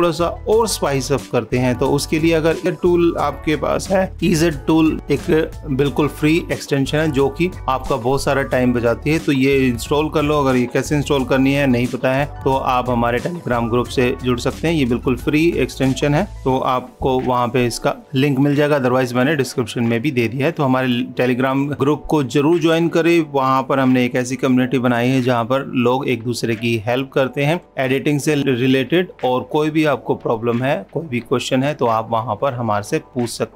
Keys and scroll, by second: 3.7 ctrl+s, 17.5 super+-.